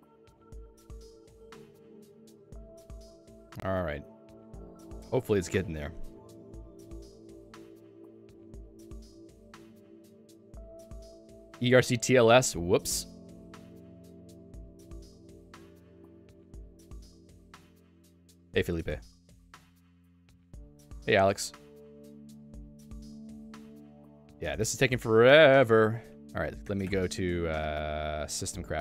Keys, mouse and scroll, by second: 25.9 click, 26.6 ctrl+alt+u.